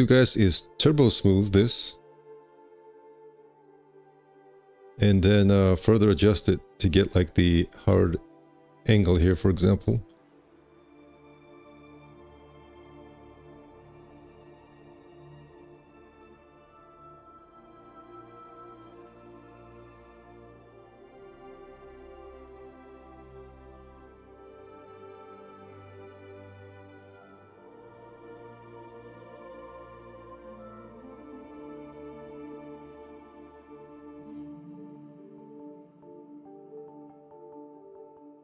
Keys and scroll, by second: 3.2 1, 4.6 ctrl+1, 15.9 2, 18.3 q, 20.8 z, 21.5 w, 26.6 1, 26.8 q, 28.1 alt+c, 31.6 x.